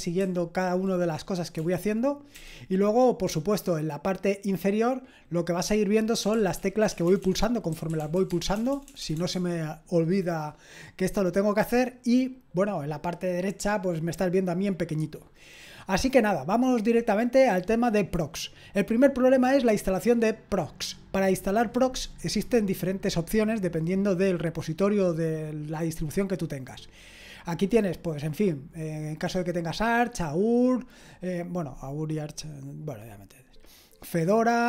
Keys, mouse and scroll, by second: 6.0-9.3 typing.